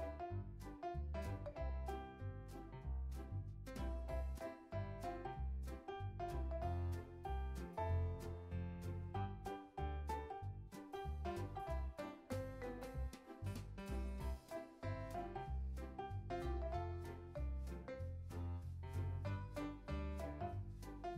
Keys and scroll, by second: 0.0-0.4 typing, 1.7 1, 2.5 0, 2.8 3, 3.0 Return, 9.2 Delete, 12.4 x, 13.6 super+c, 13.8 super+v, 14.3 z, 15.7 x, 17.7 z, 18.5 super+s, 19.3 z.